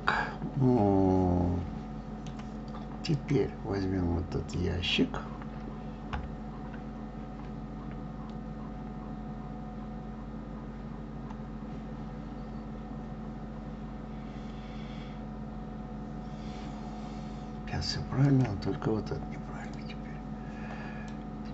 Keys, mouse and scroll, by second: 3.5 click, 6.5 KP_3, 18.6 click, 20.1 click.